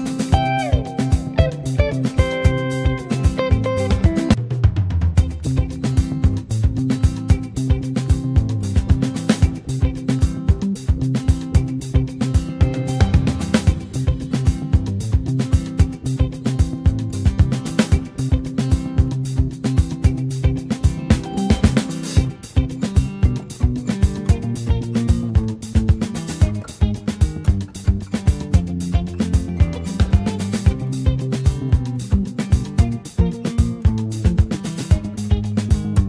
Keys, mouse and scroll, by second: 1.3 click, 2.0 middle click, 2.3 scroll up 1, 2.4 g, 5.6-7.0 middle drag, 7.0-8.3 drag, 8.3-8.8 scroll up 5, 9.0 middle click, 9.3 scroll down 2, 9.5-11.2 middle drag, 11.2 click, 12.4 KP_0, 13.2-14.0 scroll up 1, 14.0-18.1 middle drag, 18.1 scroll down 1, 19.3-20.5 drag, 19.3-20.2 scroll down 1, 21.3-21.9 scroll down 1, 21.9 click, 25.3 scroll up 2, 25.6 middle click, 26.1-27.0 scroll down 2, 26.3 shift+middle click, 27.0 click.